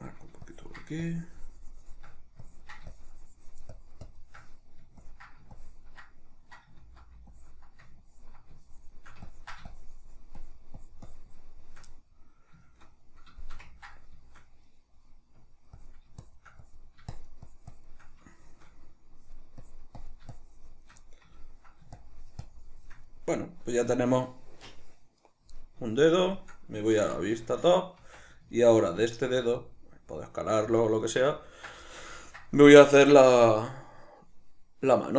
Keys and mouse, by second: 6.8 ctrl+z, 11.9-15.7 middle drag, 15.7-18.4 drag, 18.4 shift+middle click, 19.2-21.0 drag, 21.0 middle click, 22.0-23.1 shift+drag, 23.1-30.8 middle drag, 27.0 alt+q, 28.0 Tab, 29.4 s, 30.8 click, 31.0-35.1 shift+middle drag.